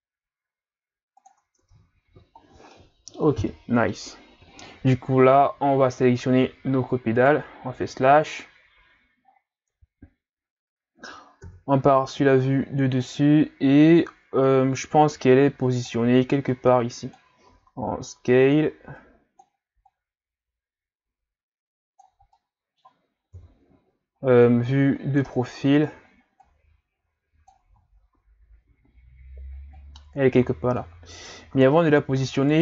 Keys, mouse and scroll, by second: 1.6 Tab, 2.1 a, 2.5 scroll down 1, 2.7-6.5 middle drag, 7.2 right click, 8.0 KP_Divide, 9.3-9.8 ctrl+scroll up 3, 11.4 KP_7, 13.5 scroll up 1, 15.3-17.5 drag, 17.5 s, 19.0-22.4 drag, 22.4 middle click, 23.3 KP_3, 24.8-25.6 scroll down 3, 25.6-26.4 scroll up 3, 26.4-28.0 drag, 28.0-28.6 scroll down 1, 28.6-29.8 scroll up 1, 29.8-31.1 drag, 31.1-31.7 scroll down 1, 31.7-32.4 scroll down 1, 32.4 right click.